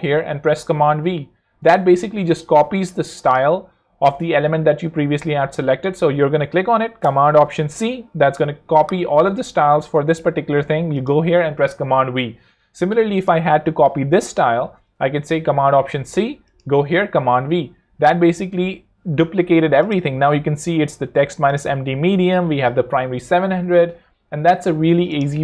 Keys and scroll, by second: 0.7 super+v, 7.6 alt+super+c, 15.8 alt+super+c, 16.9 alt+super+v, 23.3 super+z, 24.8 super+Escape, 25.3 super+z.